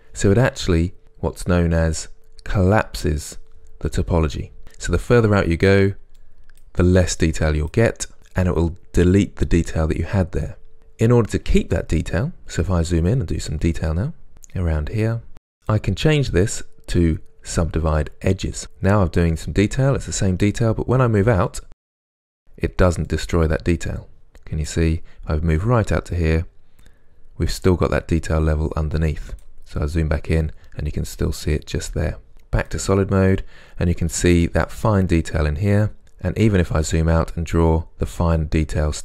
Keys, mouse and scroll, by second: 5.4-32.3 drag, 5.4-6.3 scroll down 2, 12.6-13.2 scroll up 1, 13.8-14.3 scroll up 1, 14.3 scroll up 1, 20.7 scroll down 1, 22.6-23.2 scroll down 1, 25.0-25.7 scroll down 1, 29.8-31.2 scroll up 2, 31.2-32.3 scroll up 1, 32.3-37.0 middle drag, 32.3 z, 33.3-33.9 scroll up 2, 33.9 scroll up 1, 36.0-37.0 scroll down 2, 37.0-39.0 drag.